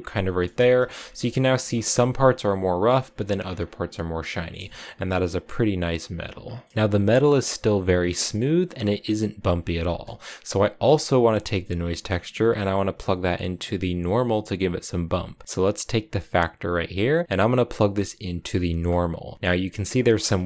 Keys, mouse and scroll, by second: 0.5 shift+middle click, 0.7-1.5 scroll up 5, 1.5-3.3 shift+middle drag, 3.3 scroll down 7, 4.5-5.8 shift+middle drag, 5.8 click, 6.3 scroll down 4, 6.4 middle click, 6.7-7.1 scroll up 1, 7.8 scroll down 3, 8.0 middle click, 8.6 click, 9.2 click, 10.0 click, 10.7-11.7 drag, 11.7 middle click, 11.9 scroll up 1, 16.5-19.3 drag, 20.3 shift+middle click.